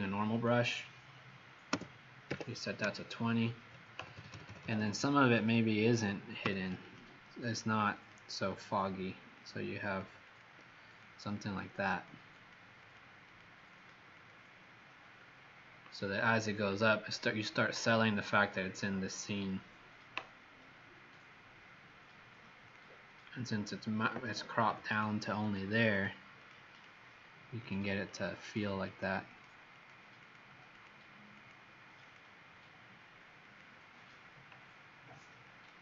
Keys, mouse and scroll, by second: 0.2 click, 1.6 Return, 2.2-4.9 typing, 6.3 x, 6.8 click, 7.4 click, 7.9 click, 8.4 click, 9.3 click, 9.8 click, 10.1 click, 10.8 click, 11.4 click, 11.8 click, 12.3 click, 12.8 click, 13.2 click, 13.6 click, 14.1 click, 22.6 click, 24.6 x, 24.8 click, 25.3 click, 25.8 click, 26.3 click, 26.7 click, 27.6 click, 28.0 click, 28.4 click, 28.8 click, 29.2 click, 29.7 click, 30.1 click, 30.7 click, 31.3 click, 32.0 click, 33.4 click.